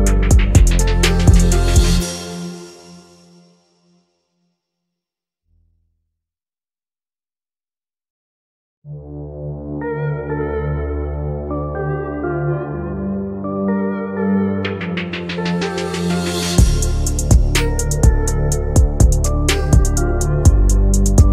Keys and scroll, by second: 20.9 Escape.